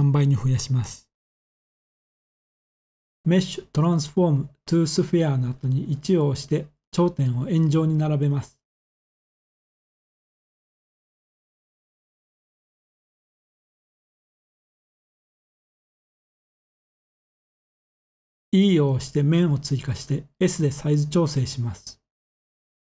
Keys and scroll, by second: 5.6 1, 15.9 typing, 18.0-18.7 typing, 20.8 g, 21.6 z.